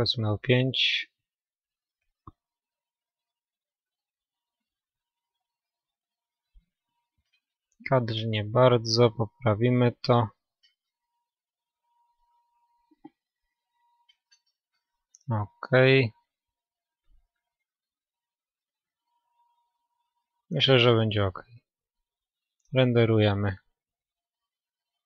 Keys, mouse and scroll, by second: 3.4 KP_0, 11.5 n, 13.1-14.8 drag, 13.9 middle click, 14.1-14.6 scroll down 1, 14.6-16.2 middle drag, 16.2-18.1 drag, 18.9-19.3 scroll up 1, 19.0 middle click, 19.3-22.2 middle drag, 20.8-22.2 scroll down 1, 22.2-25.0 drag.